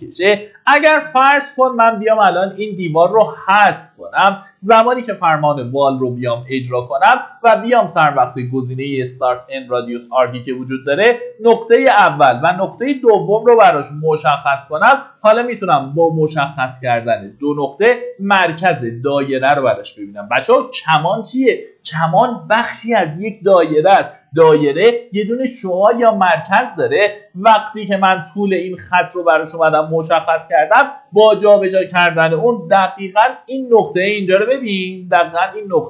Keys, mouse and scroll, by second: 0.6 Delete, 4.4-5.3 typing, 9.0 click, 10.2 scroll up 1, 11.2-14.5 drag, 32.6 ctrl+shift+d.